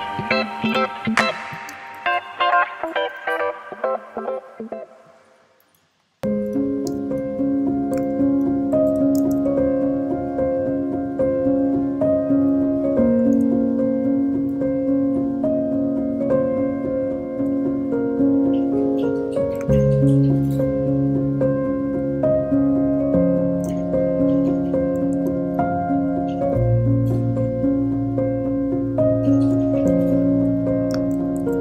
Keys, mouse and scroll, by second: 0.2-0.6 scroll down 1, 0.6 shift+d, 6.0 shift+click, 6.9 shift+], 8.1 shift+d, 12.9 scroll down 1, 13.2-14.4 middle drag, 14.4 click, 14.5-15.5 middle drag, 15.5-16.2 scroll up 3, 16.2 click, 17.6-19.7 middle drag, 19.7 shift+d, 25.4 alt+p, 28.8 scroll up 1.